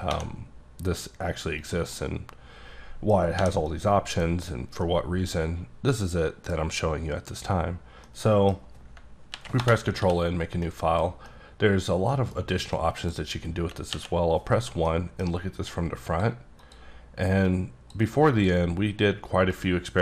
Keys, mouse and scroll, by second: 0.0-0.1 typing, 1.6 click, 1.9 middle click, 3.4 h, 3.6 middle click, 4.1 scroll down 1, 4.8 middle click, 8.0 middle click, 9.3 ctrl+n, 9.6 Return, 10.0 d, 10.6 middle click, 11.2 scroll down 1, 11.2 middle click, 12.7 middle click, 13.9 KP_1, 14.8 middle click, 15.7 click, 16.6 click, 17.8 click, 18.3 click, 19.5 click.